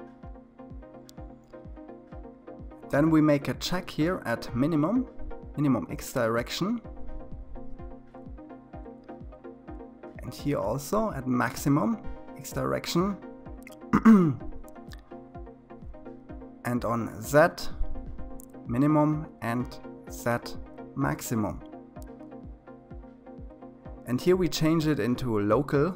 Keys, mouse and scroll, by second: 6.5 click, 10.5 click, 18.0 click, 20.4 click, 23.6-25.9 drag.